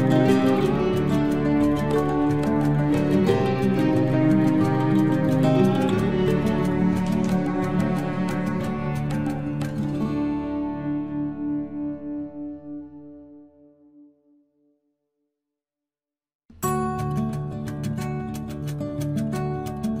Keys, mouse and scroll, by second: 1.0 t, 1.3-2.2 scroll up 1, 2.2 click, 2.6 scroll up 1, 4.4 click, 6.8 click, 7.8 Escape, 8.8 click, 9.6 space, 10.8 t, 11.8 click, 12.8 9, 13.2 Return, 15.3 space, 15.5 scroll down 1, 16.9 l, 17.6-18.0 scroll up 1, 18.0 click, 19.1 space.